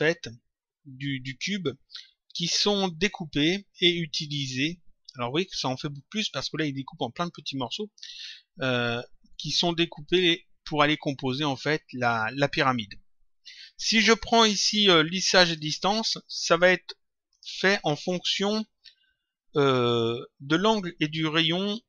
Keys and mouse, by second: 14.2 click, 15.5 click, 17.2 click.